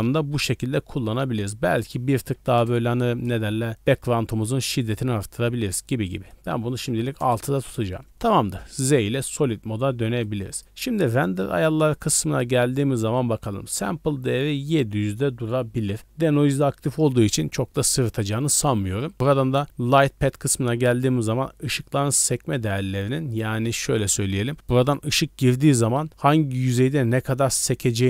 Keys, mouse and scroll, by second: 0.4-1.0 scroll down 2, 0.7 middle click, 1.0 scroll up 1, 1.7 click, 1.7-2.6 scroll up 2, 6.3 click, 8.0 z, 10.2 click, 11.9 click, 18.9 scroll down 1, 24.5 d, 24.8 click, 25.5-25.9 d.